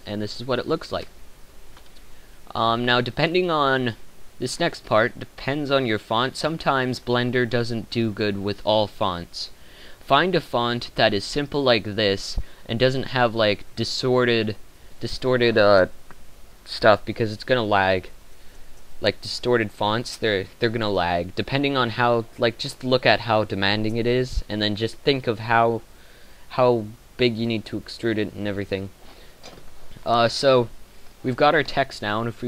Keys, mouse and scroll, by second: 0.4-2.0 drag, 3.6-4.3 drag, 26.4-28.3 drag.